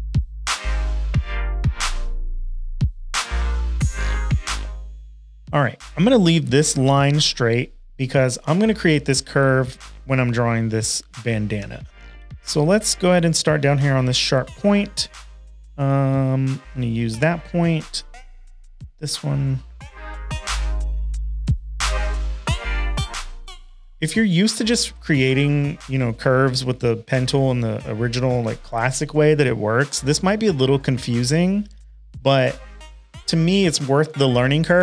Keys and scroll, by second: 1.5 super+z, 1.6 shift+super+a, 2.6 space, 2.8 space, 3.2 p, 9.7 shift+super+a, 10.0-11.5 typing, 16.4 space, 16.9 space, 17.0 space.